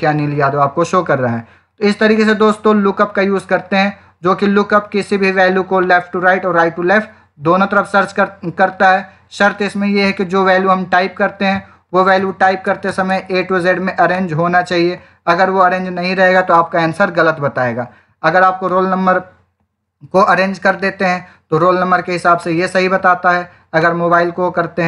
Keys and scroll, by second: 12.1-13.3 typing.